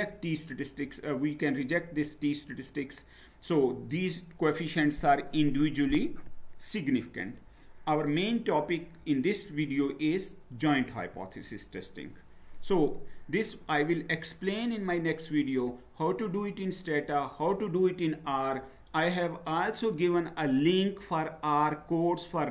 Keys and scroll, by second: 10.9 Down.